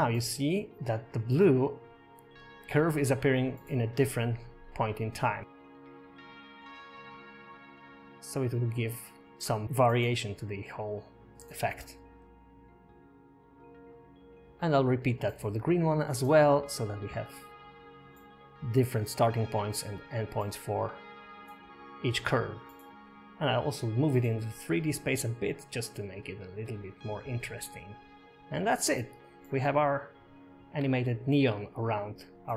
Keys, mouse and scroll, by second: 9.0 click, 10.2 click, 12.4 click, 16.1 click, 17.3 scroll up 1, 17.8 shift+middle click, 18.9 click, 19.6 Tab, 20.3 Tab, 21.4 g, 24.4 space, 26.6 space, 27.3 g, 30.6 g, 31.4 click, 31.7 g.